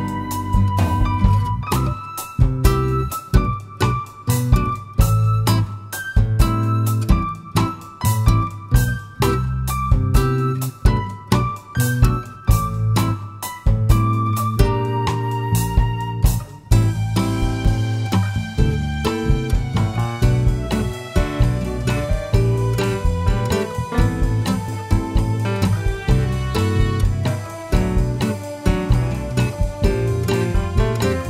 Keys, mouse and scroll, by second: 2.2 click, 2.6 s, 6.2 click, 8.0 click, 8.5 drag, 9.5-10.0 scroll down 1, 10.0 click, 10.6 drag, 11.2 g, 12.9 click, 13.1 scroll up 1, 13.7 middle click, 14.5-16.6 middle drag, 14.5-15.1 scroll down 2, 15.1 scroll down 1, 16.6 click, 17.3 `, 18.9 shift+z, 22.3 click, 22.5-23.1 scroll up 2, 23.1-24.0 shift+middle drag, 24.0-24.3 scroll up 1, 24.3 scroll down 1, 24.8 middle click, 25.7 click, 26.0 scroll down 1, 26.7 click, 27.3 shift+z, 28.3-31.2 drag.